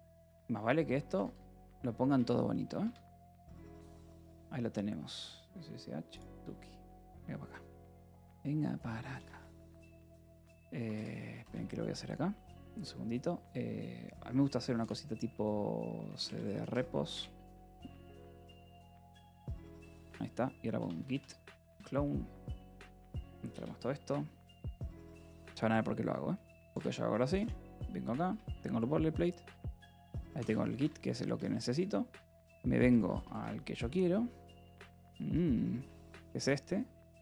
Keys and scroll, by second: 0.1 Left, 1.5 shift+;, 2.1 Return, 2.7 Tab, 9.9 w, 12.0 alt+l, 14.7-18.8 typing, 17.0 Return, 19.4 Tab, 19.7 Return, 20.4-22.0 typing, 23.4 Return, 26.1-27.4 typing, 28.2 Return, 29.1-33.5 typing, 35.8 Return, 36.7-37.2 typing.